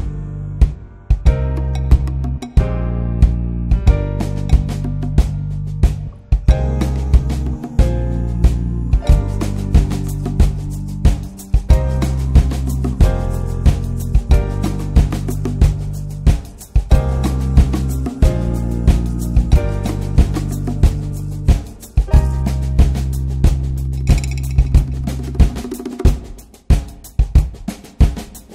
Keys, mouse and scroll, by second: 4.2-5.8 drag, 6.5 ctrl+shift+click, 7.0-7.8 middle drag, 8.1 shift+middle click, 8.3-8.6 scroll up 3, 9.9-10.3 drag, 10.6 scroll down 1, 10.9-12.3 alt+middle drag, 12.3-14.0 drag, 14.0 alt+middle click, 14.6 ctrl+z, 15.3 click, 16.0-16.4 alt+middle drag, 16.4 ctrl+z, 16.9-22.8 drag, 23.3-27.0 drag, 27.6 scroll up 3, 27.7 drag, 27.9 middle click, 28.4-28.5 drag.